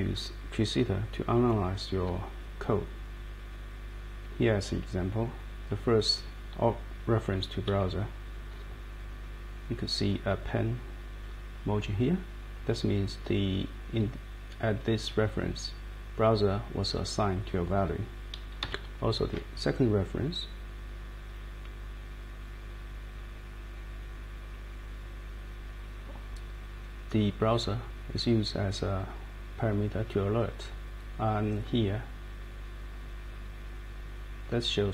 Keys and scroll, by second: 7.3 Up, 7.7 Down, 18.6 Down.